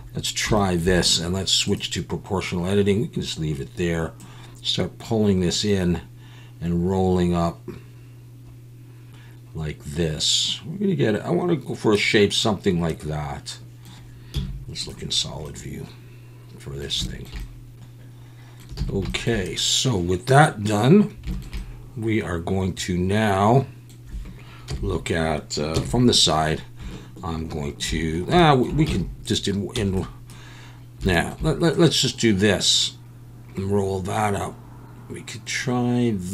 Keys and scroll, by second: 14.3 z, 18.8 alt+a, 24.7 KP_1, 25.7 KP_3, 29.8 z, 29.8 b.